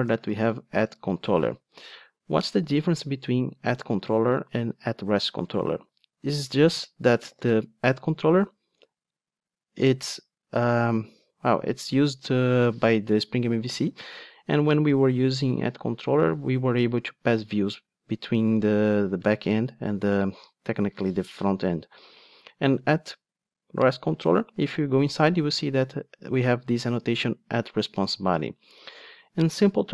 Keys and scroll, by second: 0.9 Return, 7.4 super+b, 20.3 ctrl+Tab, 24.7 super+b.